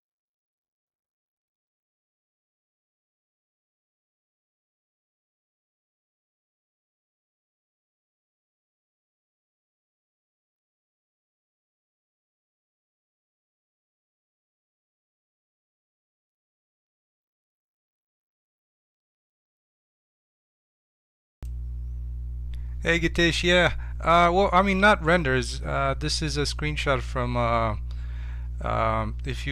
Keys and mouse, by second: 1.7-3.9 middle drag.